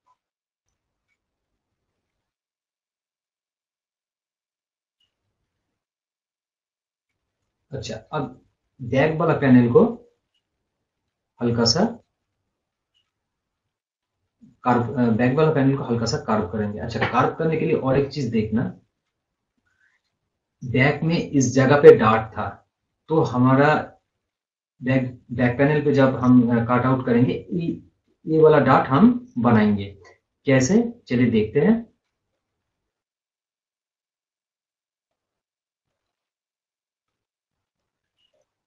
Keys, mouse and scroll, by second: 0.0 scroll up 1, 0.8 scroll down 1, 3.9 scroll up 1, 4.4-5.3 scroll, 5.3 scroll down 1, 5.8 click, 7.3-7.6 scroll down 1, 18.4 scroll up 1, 19.6 scroll down 1, 21.0-24.4 drag, 25.3-32.0 drag, 32.3 click, 32.7 scroll up 1, 32.9 scroll down 1, 33.4 scroll up 1, 33.9-34.4 scroll down 1, 34.4 right click, 35.2-38.4 drag.